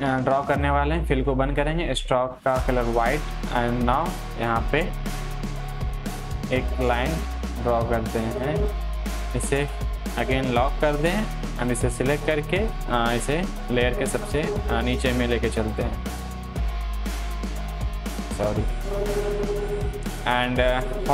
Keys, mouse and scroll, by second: 5.7 click, 6.8-19.4 shift+drag, 19.4-20.0 scroll down 1.